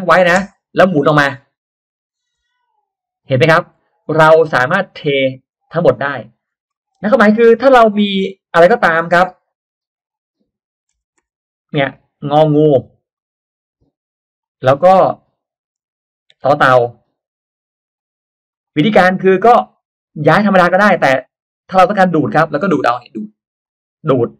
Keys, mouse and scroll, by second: 1.6 shift+middle click, 2.0 shift+middle click, 2.7 click, 3.3-4.0 scroll up 2, 4.8 click, 5.2-6.0 scroll up 2, 5.5 middle click, 6.4-7.1 scroll down 2, 6.7 middle click, 6.9 space, 7.1 click, 7.4-7.8 scroll up 1, 7.4 space, 8.6 click, 10.8 Caps_Lock, 12.4 click, 13.1 click, 14.4 click, 16.3 9, 16.8 click, 17.8 click, 18.4 click, 19.0 click, 19.0 space, 19.5 middle click, 20.1 click, 21.0 click, 22.0-22.3 scroll up 1, 22.0 middle click, 23.6 click.